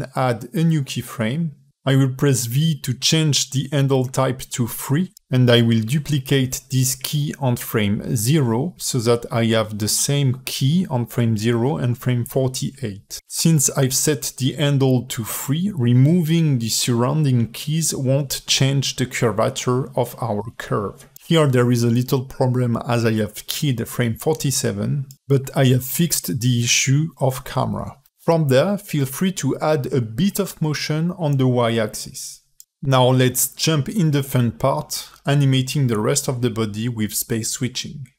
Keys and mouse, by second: 1.1-1.8 drag, 2.7 v, 6.1-6.8 drag, 7.2 shift+d, 8.8-9.3 drag, 9.7 drag, 10.1 x, 15.8 alt+shift+middle click, 16.5-17.3 drag, 17.5 x, 18.5 click, 18.8 x, 19.3 alt+shift+middle click, 19.6 space, 24.0-24.5 alt+middle drag, 25.0 KP_3, 25.6 alt+shift+middle click, 27.8 space, 28.5 ctrl+alt+middle click, 28.7-30.2 drag, 30.2 click, 30.5-35.4 typing, 30.9 ctrl+alt+middle click, 31.4 click, 31.5 alt+shift+middle click, 31.5 drag, 31.8 click, 32.0 click, 32.3 click, 32.5 click, 32.8 click, 33.4 shift+click, 36.4 alt+shift+middle drag, 37.7 space.